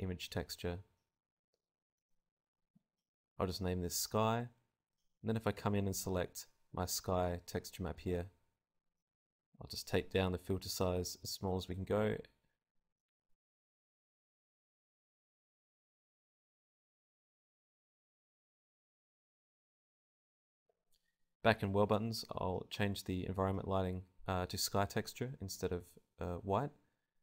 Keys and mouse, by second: 6.6 click, 9.0-13.0 drag, 15.8-17.8 drag, 18.7-20.0 drag, 21.2-23.2 drag, 23.5-25.0 drag.